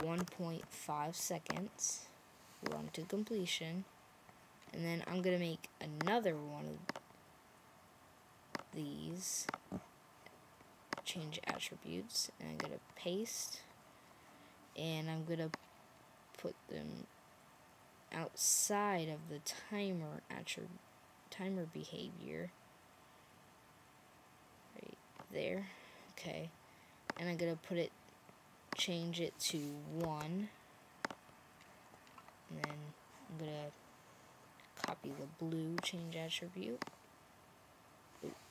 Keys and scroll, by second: 0.0-1.0 typing, 29.9 1.